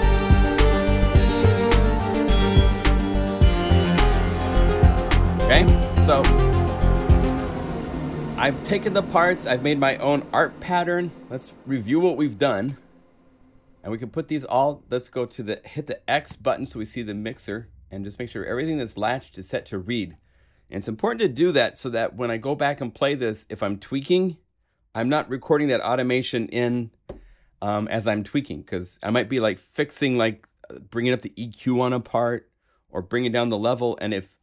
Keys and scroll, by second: 7.2 0, 16.2 x.